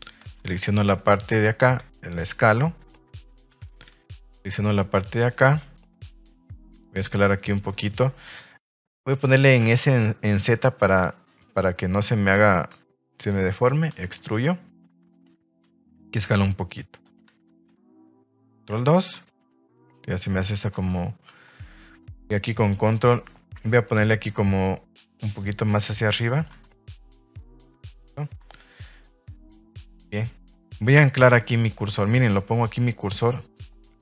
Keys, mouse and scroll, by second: 8.0 Escape, 9.5 s, 9.7 z, 10.9 click, 11.2-12.2 middle drag, 12.7 KP_1, 13.9 e, 15.0 click, 15.6 s, 17.0 click, 17.2 Tab, 17.7 z, 18.9 ctrl+2, 20.7 Tab, 21.4-22.0 middle drag, 23.6 alt+right click, 24.0 middle drag, 26.5 Tab, 26.6-27.3 middle drag, 27.7 KP_1, 28.4 shift+middle drag, 30.4 click, 31.1 click, 32.0 click, 33.0 click, 33.6 click.